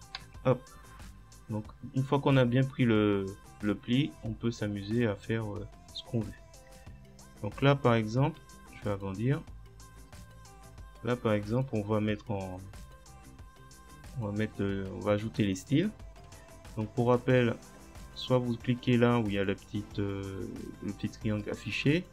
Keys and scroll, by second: 0.2 Tab.